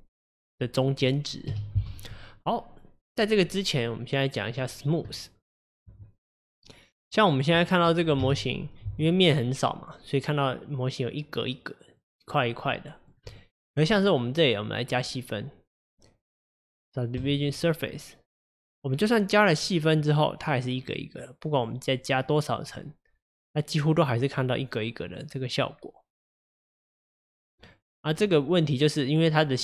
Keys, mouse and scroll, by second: 1.5 KP_Divide, 2.4 click, 3.6-7.5 middle drag, 7.5 click, 8.2 KP_Divide, 9.3-12.4 middle drag, 12.8-13.1 middle drag, 13.1 scroll down 1, 13.3 click, 13.6 click, 14.0 middle click, 14.9-18.0 drag, 18.6 drag, 19.0-21.3 scroll up 5, 21.6-23.1 drag, 23.1 scroll up 5, 24.6-27.1 middle drag, 27.1-28.2 drag, 28.2 scroll down 2.